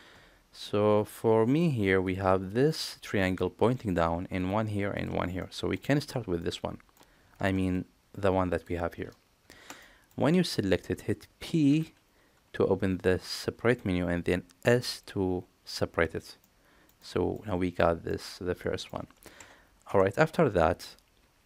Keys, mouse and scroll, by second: 0.5 middle click, 1.9 click, 2.6 shift+click, 3.0 middle click, 4.3 shift+click, 4.8 shift+click, 5.3 middle click, 6.3 middle click, 9.7 middle click, 11.6 p, 16.3 middle click, 16.9 middle click, 18.0 middle click, 19.7 Tab.